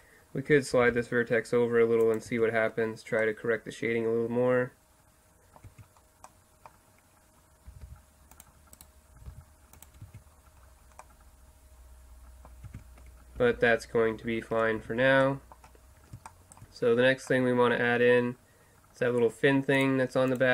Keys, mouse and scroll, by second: 0.8 g, 2.3 Tab, 3.2-5.2 middle drag, 5.7 Tab, 7.7 g, 8.8 right click, 9.2 g, 10.0 Tab, 10.5-11.7 middle drag, 12.7 Tab, 13.4 ctrl+z, 13.6 ctrl+z, 14.8 Tab.